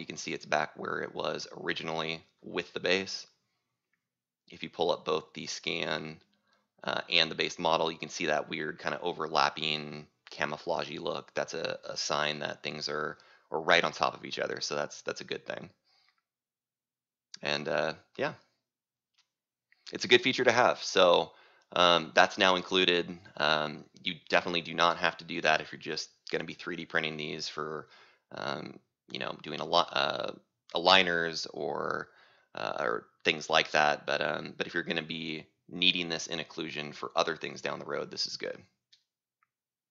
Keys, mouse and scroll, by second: 1.8 right click, 4.2 click, 6.4-10.3 drag, 10.3-11.7 right drag, 13.8 click, 20.0-22.4 right drag, 24.6 click, 27.7-29.7 drag, 33.8-39.9 drag.